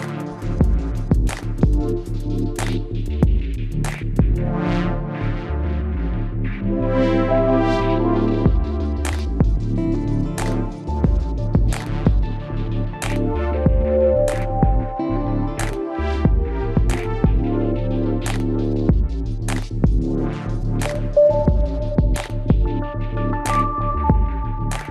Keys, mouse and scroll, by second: 0.3-2.2 right drag, 0.5 g, 3.0 ctrl+r, 4.7 ctrl+r, 6.2-10.4 right drag, 7.4 g, 9.1 g, 10.4 ctrl+r, 12.2 g, 13.8 right click, 15.7 ctrl+Tab, 16.4-18.1 right drag, 18.1 g, 19.9 g, 21.0-24.9 right drag, 21.2 g, 22.2 g, 23.9 g.